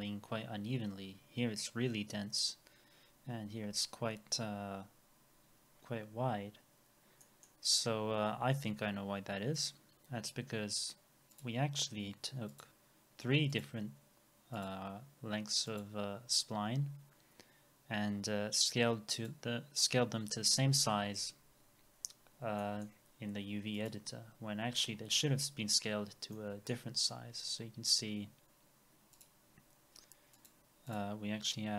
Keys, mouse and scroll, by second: 7.2 middle click, 9.6 double click, 20.6-22.6 scroll down 1, 22.6 middle click, 23.2-23.8 scroll up 1, 26.3 middle click.